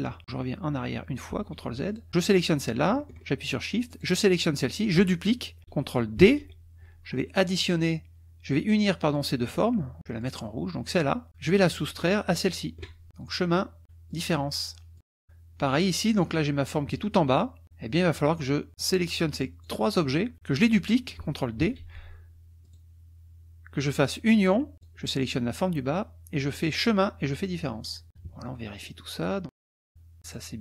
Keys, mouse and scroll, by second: 1.3 ctrl+z, 1.9 ctrl+drag, 2.2 click, 3.9 shift+click, 6.2 ctrl+d, 7.5 click, 9.3 drag, 10.2 click, 10.9-11.3 drag, 11.3 ctrl+z, 12.2 shift+click, 13.3 click, 14.1 click, 14.9 click, 15.8 click, 16.9 KP_Subtract, 17.6 click, 18.1 click, 18.8-19.8 drag, 21.6 ctrl+d, 22.6 click, 24.0 click, 24.7 shift+click, 26.8 click, 27.8 click, 28.1 KP_Subtract, 28.8 click, 29.4-30.5 drag.